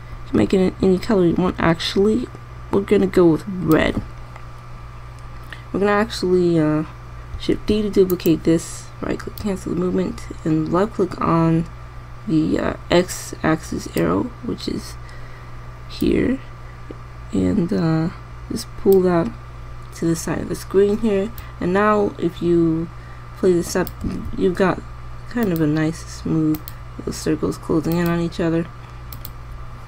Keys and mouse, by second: 8.3 shift+d, 16.7 click, 22.0-22.7 drag, 24.8 alt+a.